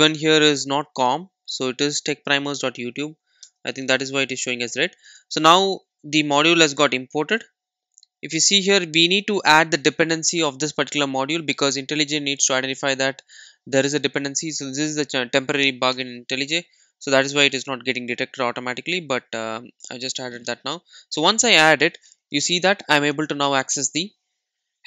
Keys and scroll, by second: 6.3 super+s.